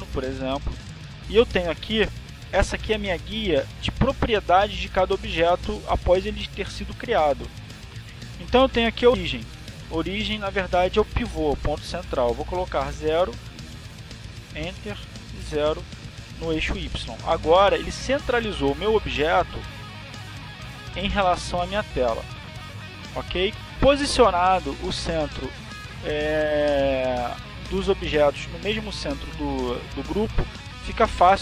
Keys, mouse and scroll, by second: 1.8 click, 2.8 click, 12.6 click, 13.2 click, 16.6 0, 18.2 Return, 19.0 0, 19.4 Return.